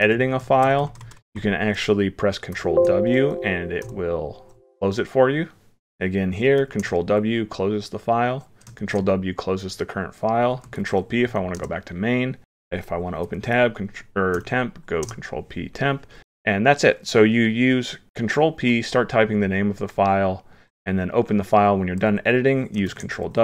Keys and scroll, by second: 2.5 ctrl+w, 6.6 ctrl+w, 8.8 ctrl+w, 10.7 ctrl+p, 13.4 ctrl+p, 22.9 ctrl+w.